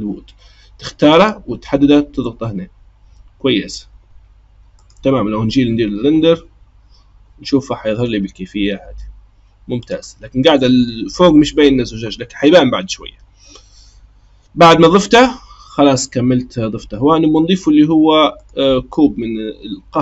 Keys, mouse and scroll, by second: 6.6 click, 9.8 click, 18.4-20.0 drag.